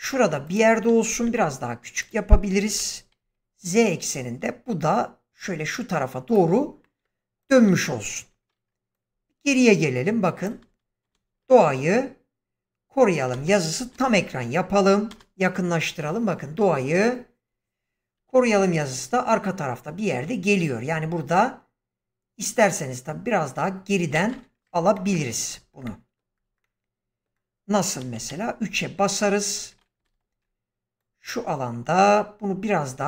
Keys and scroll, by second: 1.2 s, 2.6-3.1 typing, 11.0 space, 24.0 space, 28.1 3, 30.0 ctrl+space.